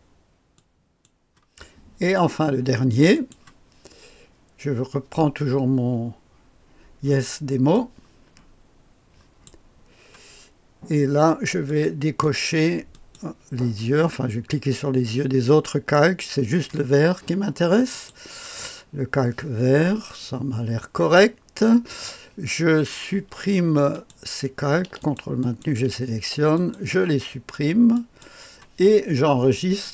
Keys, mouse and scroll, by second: 3.1 click, 20.0-25.8 drag, 27.8-29.9 drag.